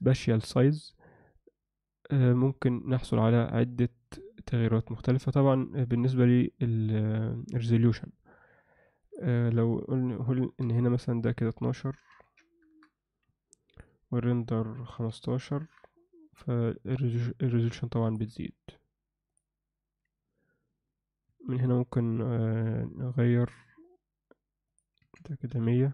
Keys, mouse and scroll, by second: 9.0-12.7 drag, 13.8-15.6 drag, 17.0-18.2 alt+middle drag, 24.8-25.9 drag, 25.6 typing.